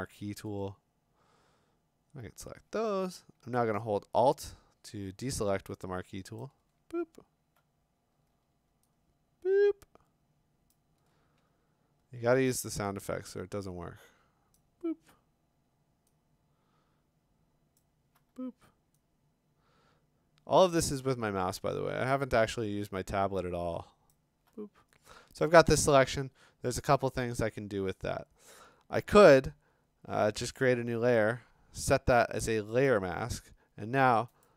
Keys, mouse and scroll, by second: 2.4 click, 6.4 alt+click, 10.7 alt+click, 14.5 click, 17.8 click, 20.9 click, 24.1 click, 30.4 click, 32.9 click, 34.4 click.